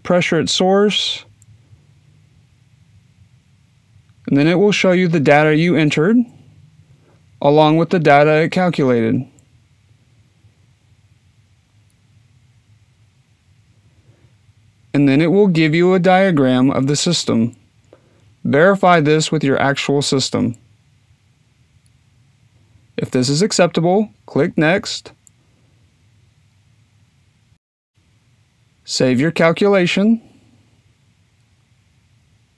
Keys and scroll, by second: 28.9-32.5 typing.